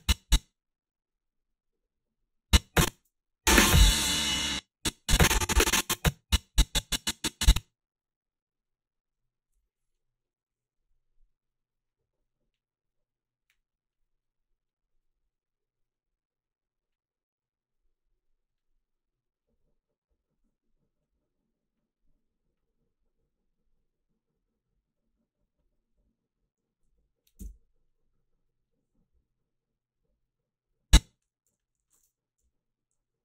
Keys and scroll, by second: 2.9 space, 4.3 space, 27.4 Return, 31.5 g, 32.4 Delete.